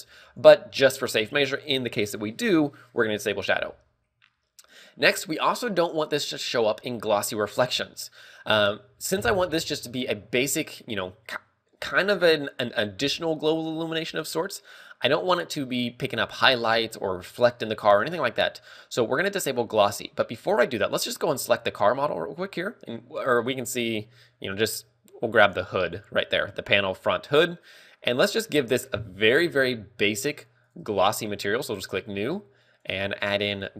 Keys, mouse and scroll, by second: 0.6 scroll up 2, 3.1 scroll up 6, 11.0 middle click, 22.2 right click, 26.1 right click, 28.7 click, 31.0 click, 31.2 click.